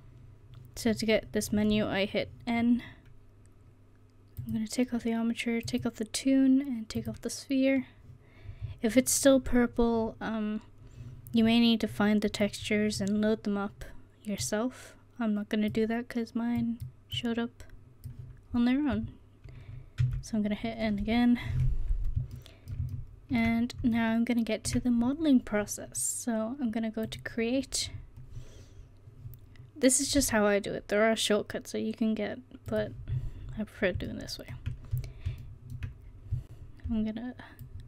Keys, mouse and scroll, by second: 4.4-11.1 drag, 14.4 click, 20.1 n, 27.1-33.1 drag, 33.1-35.4 middle drag, 37.6-37.8 drag.